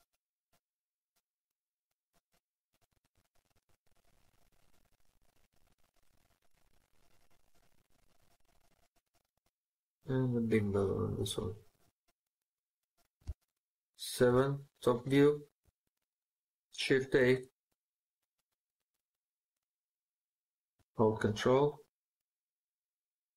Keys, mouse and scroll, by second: 1.9 right click, 2.6 middle click, 2.7-3.2 scroll up 1, 11.6 right click, 13.1 Home, 14.4 shift+scroll down 1, 14.4 shift+middle click, 17.0 a.